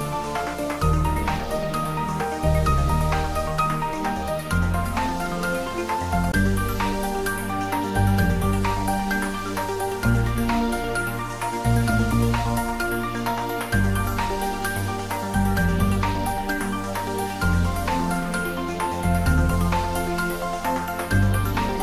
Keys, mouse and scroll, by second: 2.1-9.2 drag, 9.2 click, 12.0 r, 16.3 click, 17.3 g, 17.5 z, 18.3 Down, 19.7 click, 20.3 r.